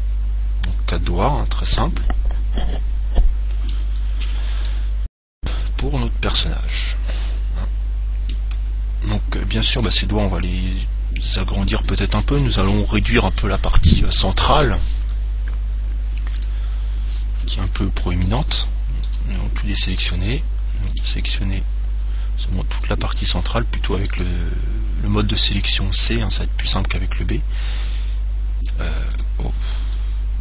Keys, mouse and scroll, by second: 4.5-4.9 scroll down 1, 4.9 middle click, 5.7 Tab, 6.6 middle click, 7.2-11.5 middle drag, 10.1 Tab, 16.6 click, 17.5-19.4 middle drag, 19.2 a, 21.3 b, 23.5 right click, 24.3 c, 29.4 right click, 30.1 a.